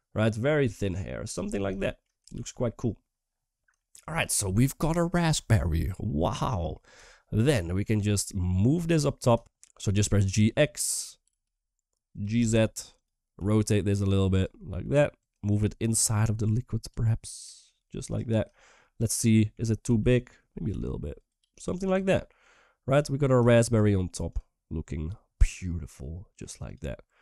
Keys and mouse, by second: 2.3 ctrl+s, 3.6 shift+middle click, 6.4 middle drag, 6.9 shift+middle drag, 11.4 g, 13.1 g, 13.1 r, 15.0 g, 15.4-15.9 middle drag, 16.2 g, 16.8 middle drag, 17.7 r, 18.3 shift+middle drag, 18.6-19.2 middle drag, 21.6 s, 21.6 g, 21.9 middle drag, 23.2 shift+middle click, 24.0 click, 25.2-26.1 middle drag, 26.4 click, 26.7 Tab.